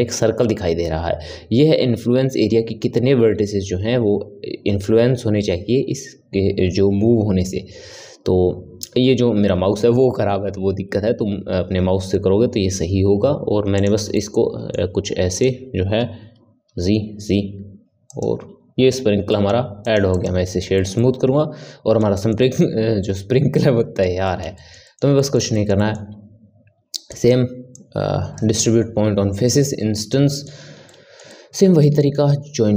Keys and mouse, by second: 14.1-15.3 middle drag, 15.3 click, 16.6 g, 19.0 Tab, 19.3 middle click, 19.8 right click, 20.7-27.1 ctrl+middle drag, 27.1 click, 27.7-30.3 drag, 30.3-32.7 middle drag.